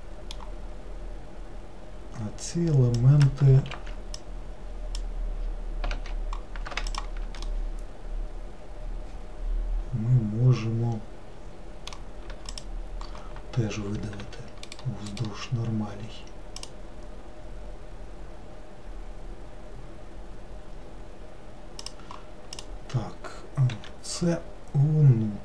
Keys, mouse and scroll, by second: 3.1 click, 3.9 alt+z, 4.3 click, 6.0 alt+z, 7.0 shift+click, 7.6-10.6 middle drag, 12.6 shift+click, 14.3 e, 15.2 right click, 16.8-18.2 right drag, 22.6 click, 23.9 e.